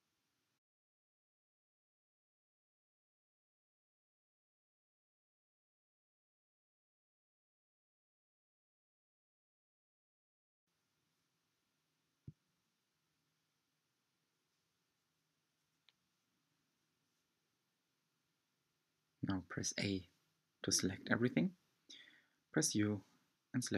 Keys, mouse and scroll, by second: 3.8 s, 7.2 scroll down 2, 7.3-9.0 middle drag, 9.0 alt+z, 9.5-12.6 middle drag, 15.0-16.7 middle drag, 16.8 click, 17.1 Tab, 18.7 a, 21.4 u.